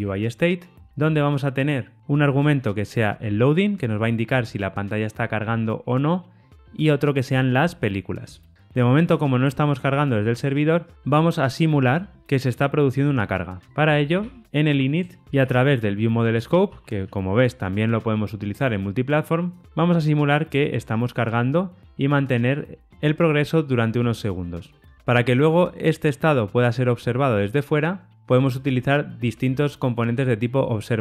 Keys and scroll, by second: 8.2 Tab, 14.4 Return, 16.3 Return.